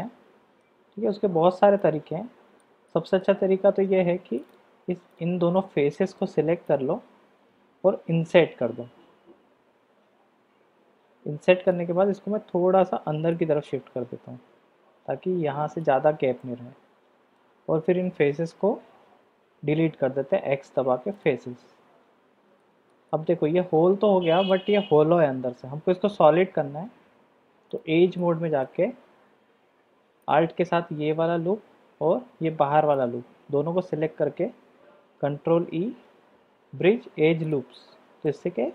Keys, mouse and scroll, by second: 1.7 click, 2.9 middle click, 4.4 click, 4.6 click, 5.5 middle click, 6.6 shift+click, 13.3 click, 14.5-15.8 drag, 16.4-17.4 middle drag, 22.6 click, 23.5-24.6 drag, 27.7 click, 28.1 click, 35.0 ctrl+e, 38.3-38.7 middle drag.